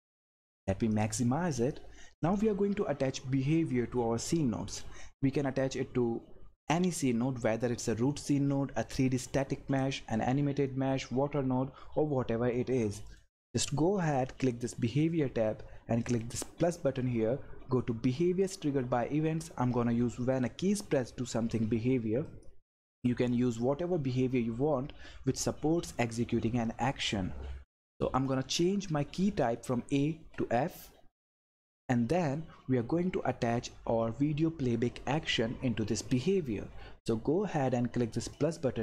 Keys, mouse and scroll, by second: 22.2 click, 28.1 click, 30.1 f, 31.3 click, 38.3 click.